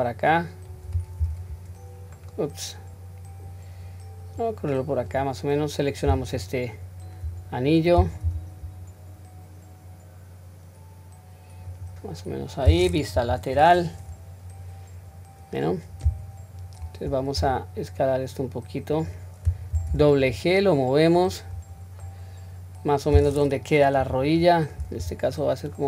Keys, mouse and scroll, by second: 1.2 r, 4.4 click, 6.2 alt+click, 8.2 g, 12.4 scroll down 1, 13.2 KP_3, 14.0 scroll up 1, 15.1 scroll down 1, 18.1 s, 21.6-22.7 scroll down 2, 22.0-23.2 middle drag, 24.0 KP_3, 24.4 scroll up 1, 25.4-25.8 drag.